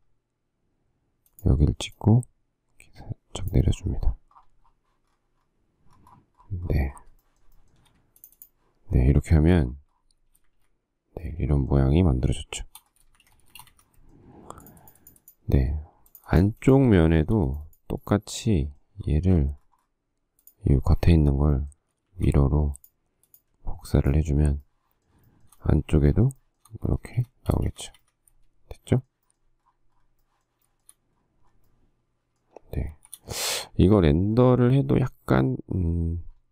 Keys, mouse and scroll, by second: 2.3 click, 7.4 shift+middle click, 7.8 shift+middle click, 7.9 shift+double middle click, 10.5 space, 10.7 Escape, 13.2 shift+space, 13.4 Escape, 14.1 Escape, 17.3 shift+middle click, 25.5 shift+middle click, 26.3 shift+middle click, 26.6 shift+middle click, 26.8 shift+double middle click, 27.2 space, 27.3 Escape, 27.7 space, 27.8 Escape, 28.0 Escape, 31.0 shift+middle click, 33.1 shift+a.